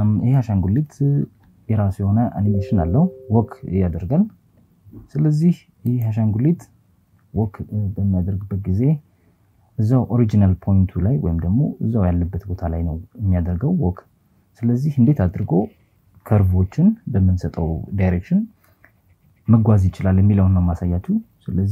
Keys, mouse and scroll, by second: 4.9 KP_4, 5.2 KP_4, 5.4 KP_4, 5.7 KP_4.